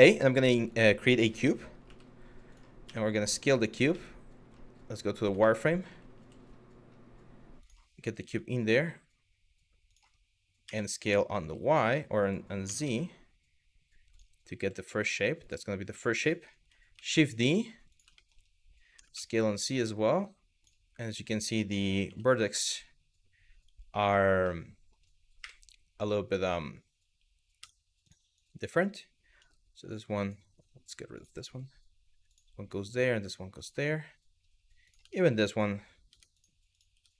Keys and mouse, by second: 1.5 g, 2.1 click, 2.5 s, 3.2 click, 5.0 shift+middle drag, 5.8 g, 7.2 click, 7.9 s, 9.5 click, 10.3 s, 11.0 t, 12.3 s, 13.8 click, 15.1 click, 15.9 middle drag, 16.6 shift+d, 17.8 middle drag, 18.6 s, 18.8 z, 20.3 click, 24.2 middle click, 25.0 KP_1, 27.2 Tab, 27.7 click, 28.1 click, 29.0 g, 30.8 click, 31.0 g, 31.9 click, 32.4 click, 32.6 g, 33.2 click, 34.5 click, 34.8 shift+middle click, 35.2 click, 35.8 Tab, 36.6 Tab, 37.0 click.